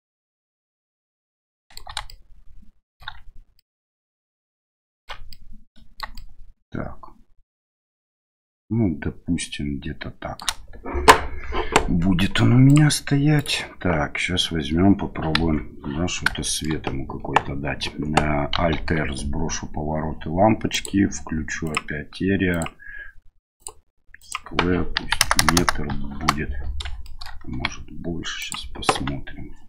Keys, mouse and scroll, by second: 2.1 shift+middle click, 3.6-5.1 ctrl+middle drag, 5.3 middle click, 6.2-10.4 shift+middle drag, 12.7 click, 13.4 right click, 15.4 KP_1, 16.4 middle drag, 18.8 alt+r, 20.8 drag, 21.6 click, 22.6-23.7 drag, 24.2-26.6 drag, 25.4 KP_0, 27.0 shift+middle drag, 27.5 g, 28.9 s.